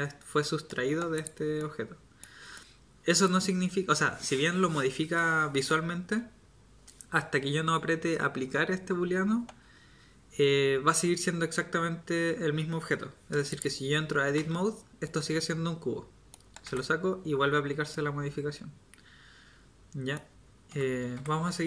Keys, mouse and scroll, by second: 14.3 Tab, 16.6 Tab, 20.7 Tab, 21.1 Tab.